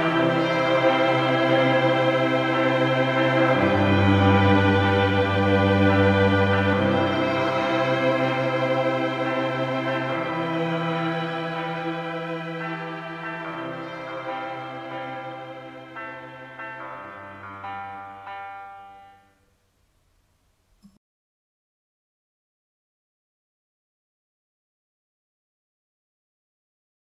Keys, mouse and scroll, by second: 2.0 click, 7.0 click, 16.9 ctrl+alt+p.